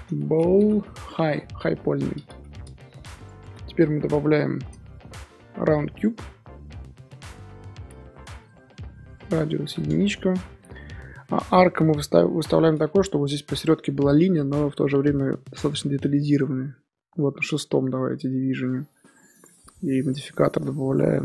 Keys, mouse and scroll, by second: 0.7 l, 3.1 click, 3.6-4.5 middle drag, 4.5 shift+a, 8.4 click, 9.3-10.5 drag, 10.5-11.0 middle drag, 11.0-11.3 scroll up 1, 11.3-12.3 middle drag, 12.3-12.7 scroll up 2, 12.7 KP_1, 15.6-19.4 drag.